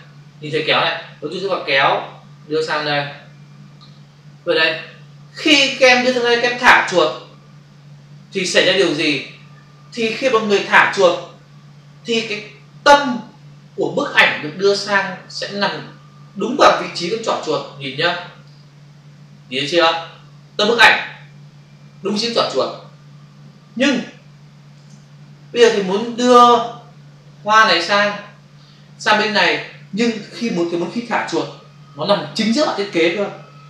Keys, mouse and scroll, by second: 1.5 click, 24.7 ctrl+alt+z, 25.9 click.